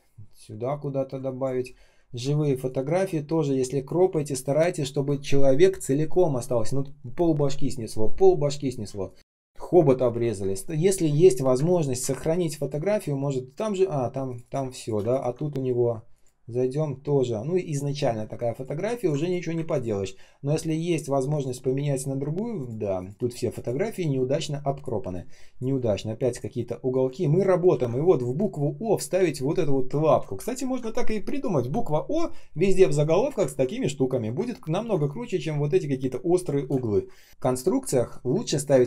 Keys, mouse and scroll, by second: 0.2 space, 2.0-2.4 ctrl+scroll down 1, 2.4 space, 2.8 space, 2.9 space, 8.8 space, 9.1 space, 11.0 ctrl+shift+3, 11.6 ctrl+click, 14.5 space, 15.0 ctrl+click, 18.9 ctrl+click, 19.6 ctrl+click, 23.7 space, 24.2 space, 24.2 space, 27.0-27.3 ctrl+scroll up 1, 27.6 ctrl+м, 30.4-31.5 ctrl+scroll down 1, 33.4 ctrl+scroll down 1, 34.3 ctrl+scroll up 1, 35.4 space, 35.9 space, 35.9 space, 36.8 ctrl+scroll down 1, 38.4 ctrl+click.